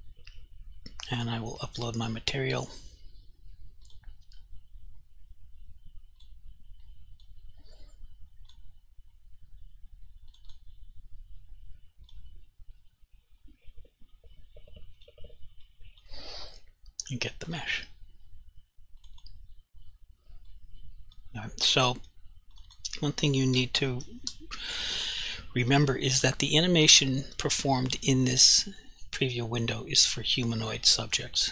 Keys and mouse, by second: 1.7 click, 7.0 click, 8.6 click, 15.0 click, 15.8 click, 17.6 click, 20.7 click, 22.6 click, 22.8 double click, 24.0 0, 24.3 Return, 26.3 click.